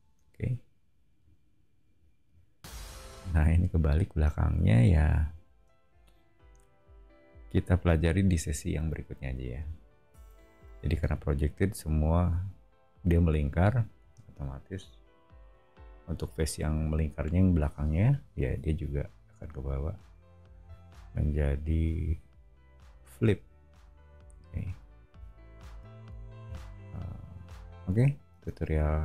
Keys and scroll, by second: 28.3 space, 28.7 Escape.